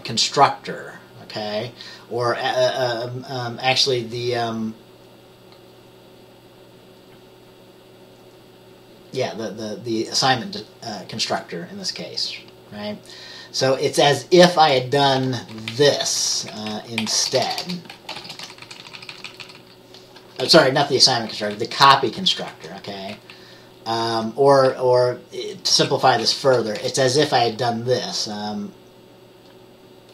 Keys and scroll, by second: 15.8-17.6 Left, 17.6 BackSpace, 17.7 BackSpace, 18.3 shift+9, 18.7 Right, 18.9 Right, 19.0 Right, 19.2 Right, 20.6-22.1 typing, 23.2-25.3 typing, 24.8-26.8 Right.